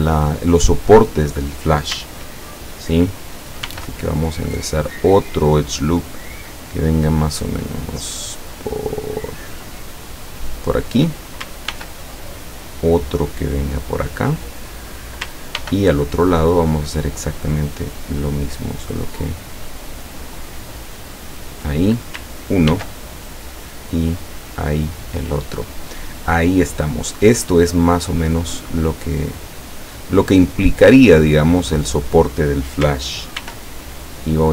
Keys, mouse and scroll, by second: 3.7 ctrl+r, 4.6 click, 10.9 click, 11.8 ctrl+r, 12.5 click, 14.4 click, 15.6 ctrl+r, 16.2 ctrl+click, 21.4 click, 22.7 ctrl+r, 23.2 ctrl+click, 24.8 click, 28.0-30.1 middle drag, 33.4 ctrl+r.